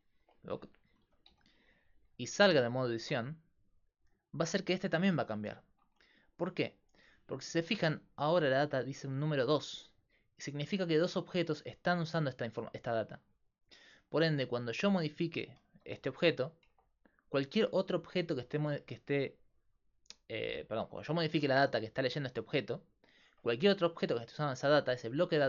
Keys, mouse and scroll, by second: 0.0 click, 0.5 z, 1.0 g, 3.0 Tab, 14.6 click, 14.9 Tab, 15.7 g, 16.3 click, 16.7 Tab, 20.8 Tab, 21.3 g, 23.4 Tab.